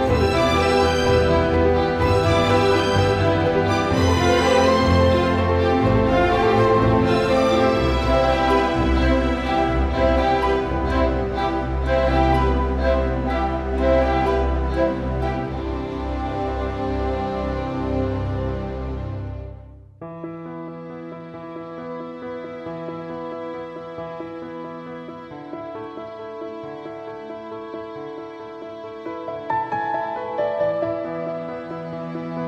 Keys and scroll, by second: 8.7 super+t, 31.4 super+t.